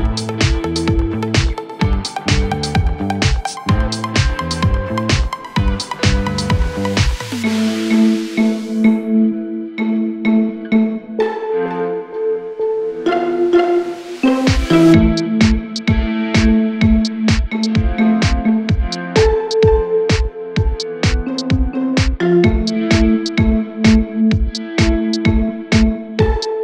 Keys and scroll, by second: 1.0 Delete, 13.7 ], 15.5 ], 22.1 ], 25.5 ].